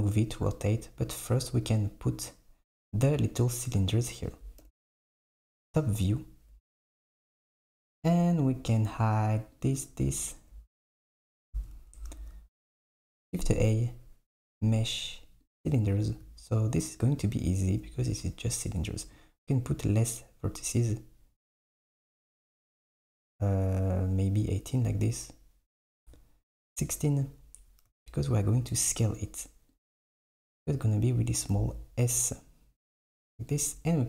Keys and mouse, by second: 4.7 KP_7, 9.1 click, 9.7 click, 11.6 s, 12.2 shift+a, 19.2-22.3 drag, 25.9-28.0 drag, 28.0 q, 29.2 click, 29.8 click, 31.6 s.